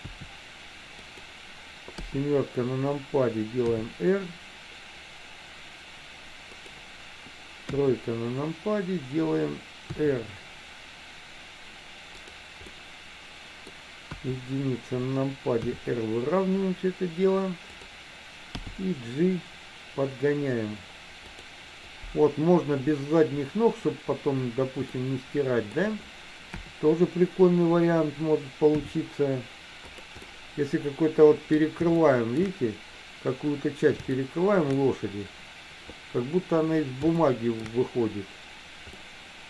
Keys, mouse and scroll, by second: 0.2 s, 2.1 KP_7, 3.8 r, 7.9 KP_3, 10.0 r, 12.8-13.8 middle drag, 14.2 KP_1, 15.6 r, 18.7 g, 25.1 middle click, 26.7 KP_7, 28.9 r, 30.4-31.7 middle drag, 32.1 shift+middle click, 34.3 shift+middle click, 37.3 shift+middle click, 39.1 middle click.